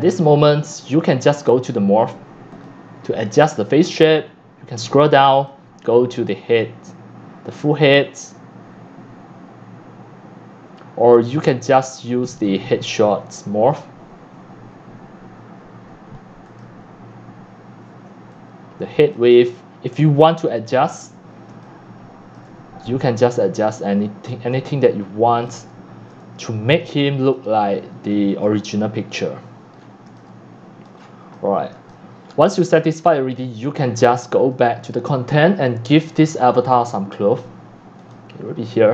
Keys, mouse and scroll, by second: 0.0-3.3 typing, 0.2 scroll down 1, 0.2 scroll down 1, 0.3 scroll down 1, 0.3 scroll down 1, 0.3 scroll, 0.4 scroll down 1, 0.5 scroll, 0.5 scroll down 1, 2.6 click, 3.6-5.3 drag, 9.7-10.6 drag, 10.7-11.6 middle drag, 10.9-11.6 scroll down 1, 12.4 click, 16.5 click, 19.4-20.7 c, 21.5-22.2 c, 22.4 c, 22.6 c, 24.9-27.0 typing, 25.6 click, 27.3 click, 28.2 c, 29.7 middle click, 29.7 scroll, 30.0 c, 30.6-31.7 scroll down 11, 30.9 click, 31.2 x, 31.9-32.3 drag, 32.3-33.8 typing, 32.3 scroll down 6, 33.1 click, 33.4-34.7 scroll up 10, 33.8-34.7 middle drag, 34.7-37.3 drag, 37.7 click.